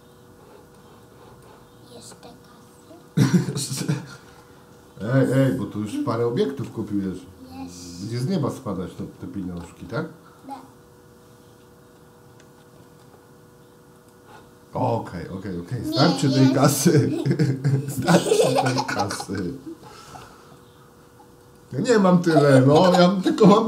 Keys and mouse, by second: 0.3-0.8 drag, 1.1-1.5 drag, 3.9 shift+d, 9.0 shift+d, 12.5 shift+d, 15.7 shift+d.